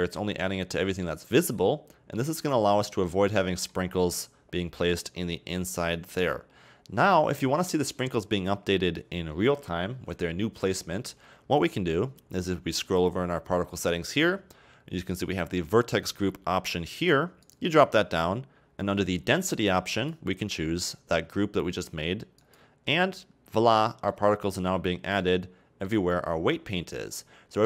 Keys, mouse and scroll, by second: 0.1-0.4 scroll down 2, 0.4-2.9 middle drag, 2.9 scroll down 2, 3.1-3.9 middle drag, 3.9-6.9 scroll up 1, 8.7-11.7 scroll down 1, 12.1-16.7 scroll down 16, 17.5 click, 17.9-20.0 scroll down 4, 20.0-23.0 drag, 23.8-24.7 middle drag, 24.7-25.3 scroll up 1, 25.3-26.8 middle drag, 26.8-27.1 scroll up 2, 27.1-27.6 middle drag.